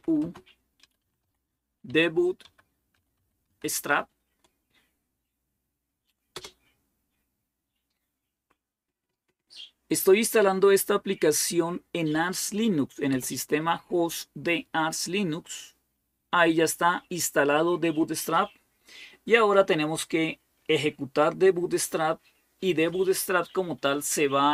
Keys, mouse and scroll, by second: 0.0-4.1 typing, 6.1 Return, 12.9 Return, 20.4-22.0 scroll down 1, 23.1-24.5 scroll down 1.